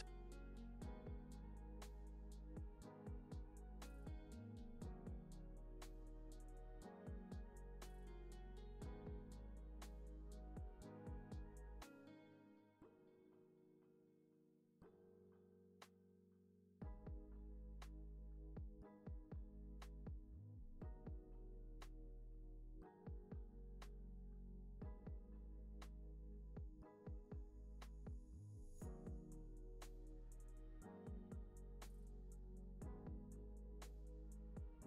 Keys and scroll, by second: 1.2 super+s, 8.9 super+s, 16.8 p, 26.2 x, 34.2 Left.